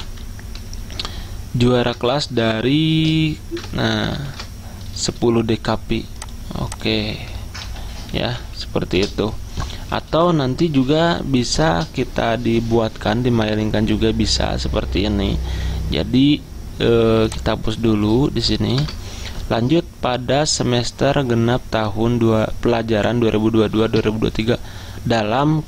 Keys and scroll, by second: 0.0 Delete, 6.8 ctrl+shift+Left, 7.7-8.8 typing, 11.0 i, 18.9 BackSpace.